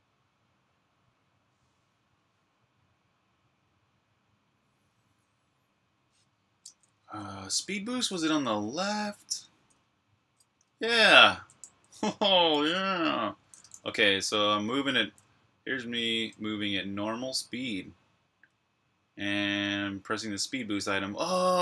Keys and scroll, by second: 6.3-21.6 typing.